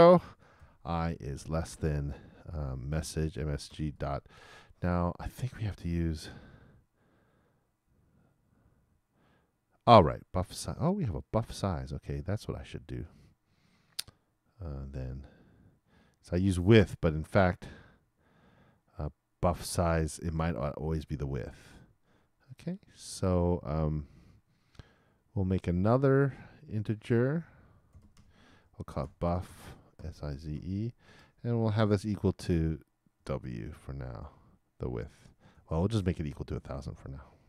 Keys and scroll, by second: 1.2 shift+\, 1.4 shift+,.